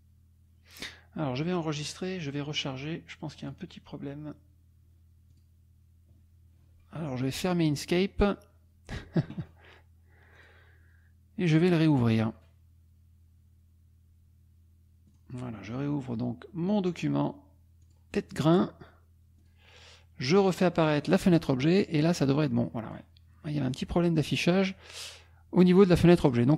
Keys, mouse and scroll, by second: 0.0 click, 1.6 click, 2.3 click, 3.5 click, 5.3 click, 7.4 click, 10.4 click, 11.9 click, 15.1 click, 17.9 click, 19.5 click, 20.4-21.1 drag, 22.5 click, 23.7 click, 24.3 click, 26.3 click.